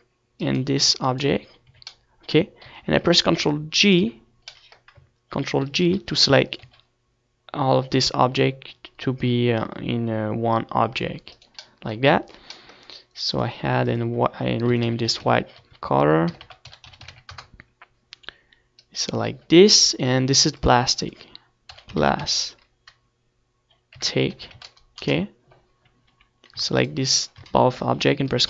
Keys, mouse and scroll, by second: 2.4-4.9 middle drag, 2.4-5.8 right drag, 4.9 z, 5.1-7.1 middle drag, 5.8 g, 7.1 right click, 7.2 z, 7.3 middle click, 8.9 ctrl+j, 9.5 g, 14.7 right click, 14.9-16.8 middle drag, 16.8-20.6 drag, 22.0-24.1 right drag, 24.1-28.3 drag.